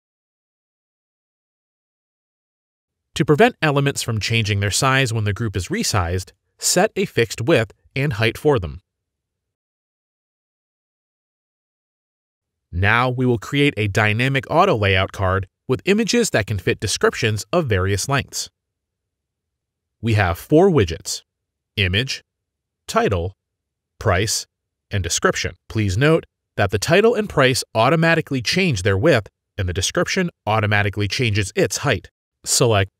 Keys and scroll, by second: 18.6 shift+F10.